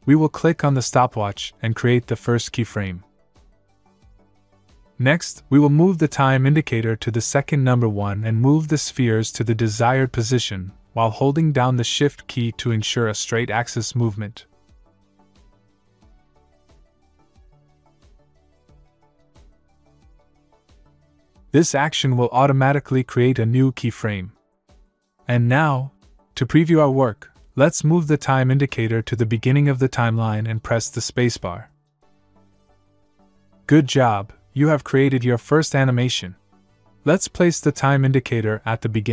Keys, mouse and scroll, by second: 0.7 click, 5.0 click, 13.3 click, 27.2 click, 32.1 space, 34.9 space, 38.2 click.